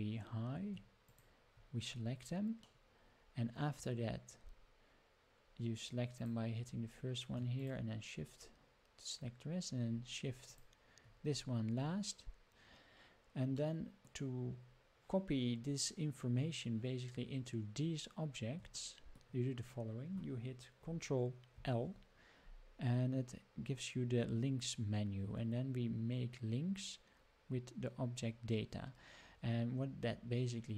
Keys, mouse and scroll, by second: 0.2 scroll down 2, 1.1 shift+click, 2.7-3.9 middle drag, 4.5-5.1 scroll up 4, 5.1 scroll down 1, 6.1 click, 6.7 scroll down 4, 7.6 shift+click, 9.1-10.0 scroll up 8, 10.5 shift+click, 11.7 scroll down 5, 13.6-14.1 middle drag, 14.6 scroll up 3, 18.9 shift+middle click, 21.5 ctrl+l.